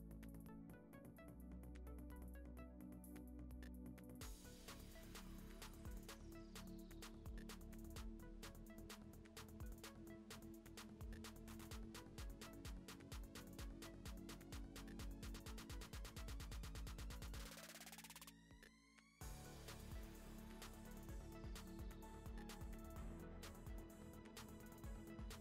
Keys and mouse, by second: 0.4 middle click, 3.6 middle click, 3.8 a, 3.9 alt+e, 5.6 Tab, 6.2 click, 6.4 click, 6.6 click, 8.1 click, 8.5 click, 9.5 middle click, 9.7 click, 9.9 middle click, 10.5 middle click, 11.1 middle click, 11.3 Tab, 11.5 middle click, 12.0 2, 12.1 click, 12.4 g, 13.0 click, 13.2 g, 13.8-14.8 drag, 15.5 middle click, 15.5 3, 17.0 middle click, 17.3 g, 17.7 middle click, 17.9 shift+click, 18.8 middle click, 19.4 shift+click, 19.5 middle click, 20.4 shift+click, 20.6-21.9 middle drag, 24.1 shift+d, 24.4 p, 24.6 Tab, 24.9 Tab, 25.1 a.